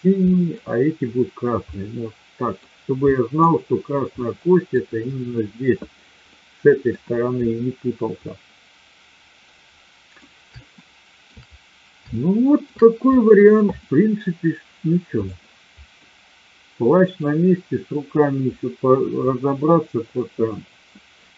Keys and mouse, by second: 0.3 middle click, 1.7-2.6 middle drag, 3.1 middle click, 4.2-4.6 middle drag, 6.2-6.9 middle drag, 8.1-10.1 middle drag, 10.6-11.2 shift+middle drag, 12.1-12.6 shift+middle drag, 13.6 click, 16.0-17.1 middle drag.